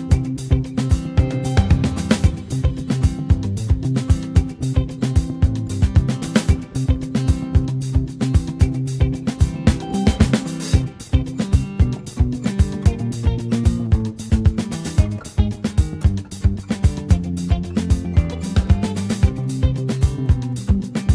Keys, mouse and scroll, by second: 0.6 Tab, 1.7 click, 1.9 middle click, 2.6 click, 4.3 middle click, 5.1 click, 6.6 click, 9.0 scroll down 2, 9.7 click, 10.5 Tab, 11.1 click, 12.3-16.8 drag, 17.3 Tab, 18.0 click, 18.4 click, 20.2 alt+middle click.